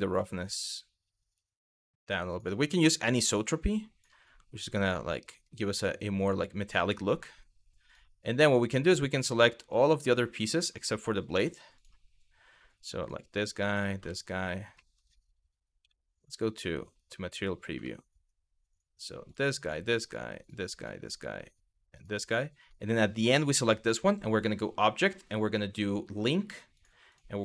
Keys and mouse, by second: 2.7 click, 5.0 middle click, 6.9 middle drag, 7.5 click, 8.6-8.9 drag, 9.4-9.7 drag, 10.2 ctrl+click, 12.6 click, 13.3 shift+click, 13.7 shift+middle drag, 14.5 middle click, 15.5 z, 17.6 shift+middle drag, 18.9 drag, 19.3 shift+click, 20.4 shift+click, 21.6 shift+click, 24.1-27.4 drag.